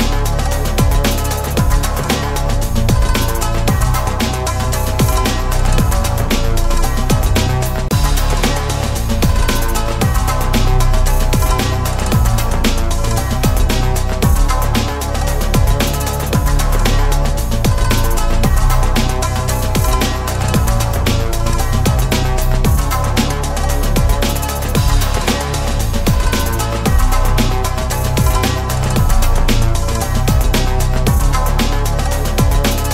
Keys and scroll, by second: 13.9 ctrl+z, 17.3 ctrl+s.